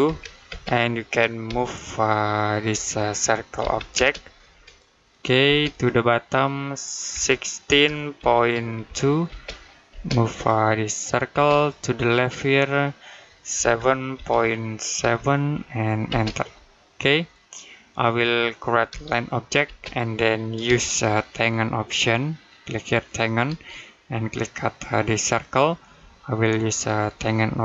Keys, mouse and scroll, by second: 0.3 space, 1.3 m, 3.8 space, 4.4 click, 5.3 space, 5.5 click, 6.9 typing, 9.1 space, 10.2 click, 11.2 space, 11.4 click, 13.4 typing, 15.9 space, 18.7 l, 19.5 space, 20.8 right click, 23.1 shift+click, 25.1 click, 26.5 shift+right click.